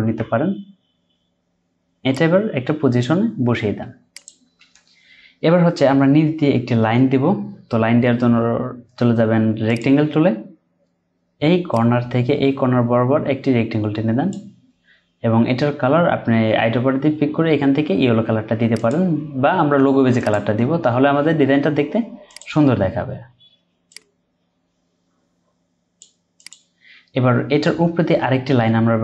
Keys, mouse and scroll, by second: 0.0 Up, 3.5-4.1 scroll down 1, 15.4-16.2 scroll up 1, 20.5-23.3 scroll down 1.